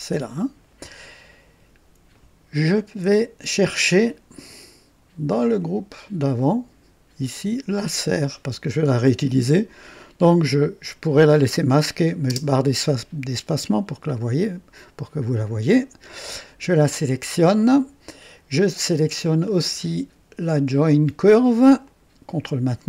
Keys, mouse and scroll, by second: 0.0 right click, 5.5 click, 7.8 click, 12.2 space, 13.5-15.0 drag, 15.3 scroll up 1, 15.8 right click, 19.4-19.7 scroll down 1, 21.8 ctrl+click.